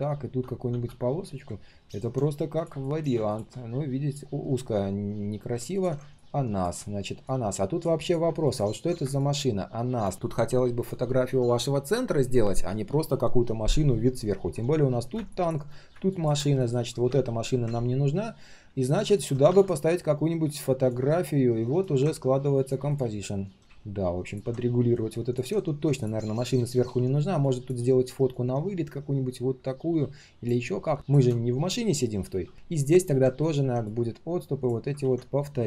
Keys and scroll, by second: 2.2 ctrl+shift+4, 35.0 ctrl+z.